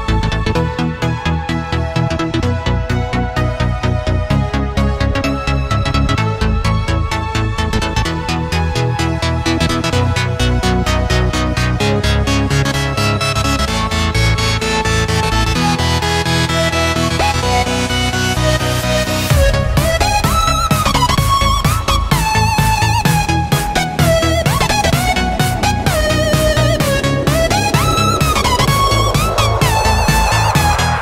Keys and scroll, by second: 19.6 v, 20.4 a, 22.4 v, 23.7 a, 27.2 u, 30.7 a.